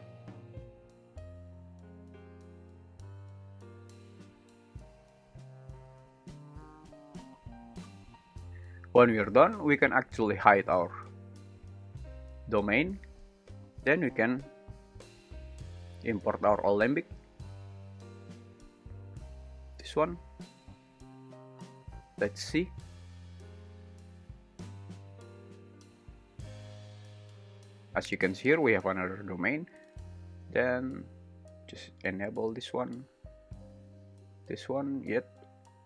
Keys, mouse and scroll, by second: 10.5-11.8 drag, 14.2-14.8 drag, 22.8 space, 31.7 click, 34.0 g, 35.3 Escape.